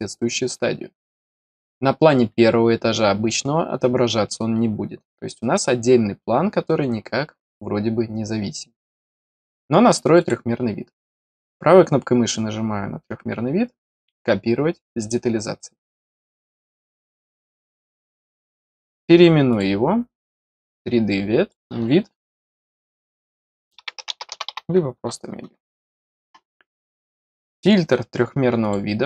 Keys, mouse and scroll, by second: 0.9 click, 1.1 click, 9.3 click, 10.1 click, 11.2 right click, 14.9 click, 18.1 right click, 19.4 click, 20.2 click, 20.7 click, 26.8 middle click, 28.5 click.